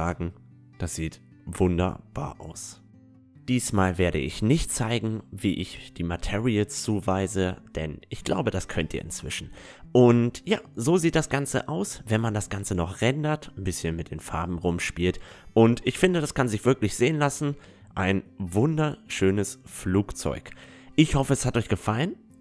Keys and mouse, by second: 0.9-2.8 middle drag.